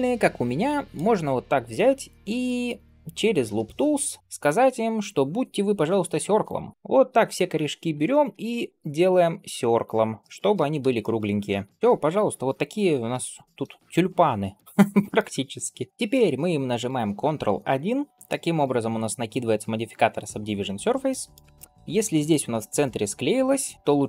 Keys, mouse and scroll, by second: 1.1 click, 2.3 shift+middle click, 3.0-6.4 right drag, 6.7 click, 6.7 shift+r, 6.9 shift+r, 7.3 click, 8.0 shift+r, 8.5 click, 9.1 shift+r, 9.7 click, 10.2 shift+r, 10.8 shift+middle click, 11.7 middle click, 11.7 scroll up 3, 12.7 scroll down 1, 13.1 shift+middle drag, 13.5 scroll up 1, 14.4-15.0 middle drag, 15.9 scroll up 1, 16.7 click, 18.1 ctrl+1, 18.6 ctrl+space, 20.6 scroll up 2, 20.9-21.3 middle drag, 21.4 shift+middle drag, 21.7 scroll up 1, 22.0 middle click, 22.3-22.7 scroll up 2.